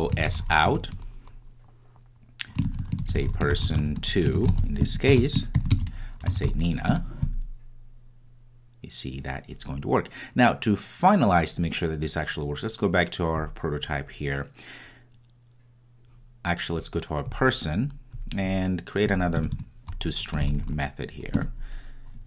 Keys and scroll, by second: 0.7 Return, 7.2 Return, 21.4 Return.